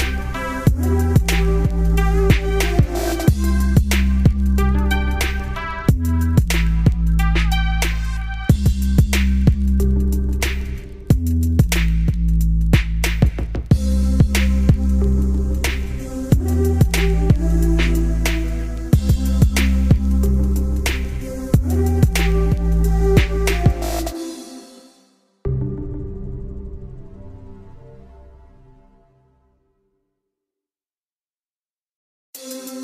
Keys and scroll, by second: 4.4 ctrl+space.